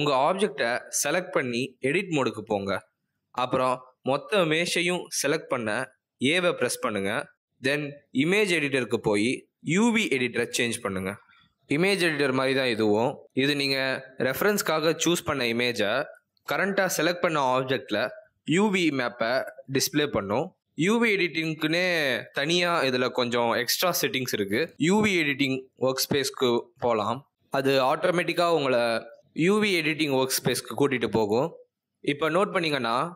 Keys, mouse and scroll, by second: 1.8 click, 5.5 click, 6.2 a, 9.1 click, 15.1-17.4 scroll down 15, 17.4 click, 21.8-23.3 scroll up 15, 30.5 click, 31.5 Tab.